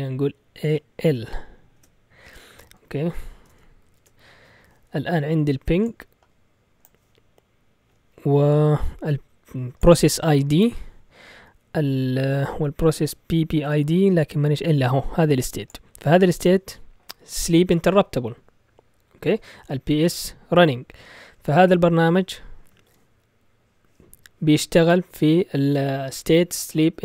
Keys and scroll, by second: 0.7 l, 1.7 Return, 2.4-3.2 typing, 3.5 Return, 4.0 Return, 4.7 typing.